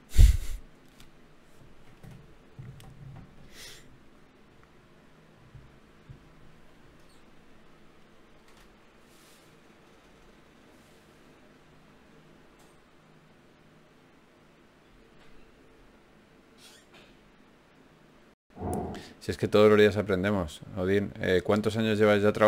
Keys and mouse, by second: 0.4-1.4 drag, 3.4 g, 5.6 g, 8.2 g, 11.0 ctrl+Tab, 12.6 f, 15.4 ctrl+Tab, 16.8 click, 19.0 alt+m, 21.1-22.2 drag.